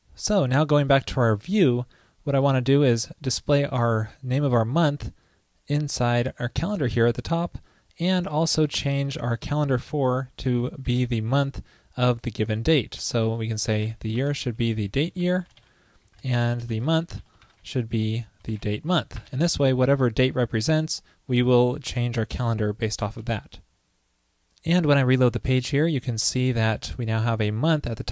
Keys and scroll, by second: 2.7 super+v, 14.2 ctrl+i, 17.5 ctrl+l, 23.3 super+s, 25.6 super+r.